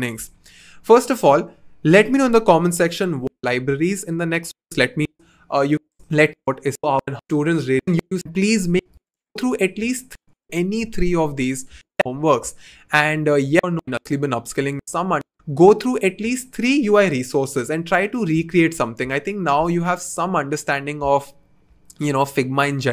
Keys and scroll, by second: 5.1 2.